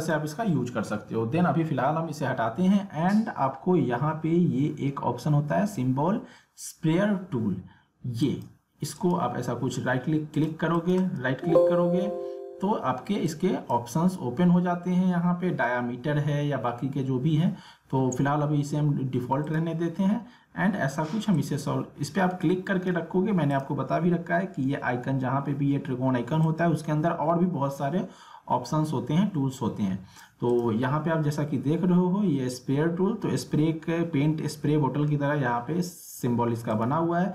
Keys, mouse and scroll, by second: 8.2 click, 8.9 right click, 10.3 click, 11.0 right click, 13.2-16.0 drag, 19.4-23.5 drag, 26.4-30.5 drag, 36.7 right click.